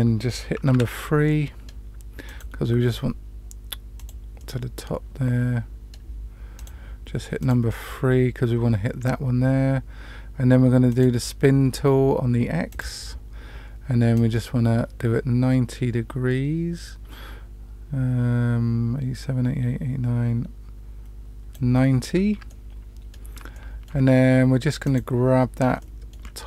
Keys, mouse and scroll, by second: 0.6 3, 1.2 middle click, 2.2 click, 3.9 click, 4.3-5.9 middle drag, 6.5 click, 7.3 click, 10.8 click, 12.7 click, 14.1-21.5 drag, 22.4 middle click, 23.4 shift+middle click, 24.7 click, 25.7 shift+middle click.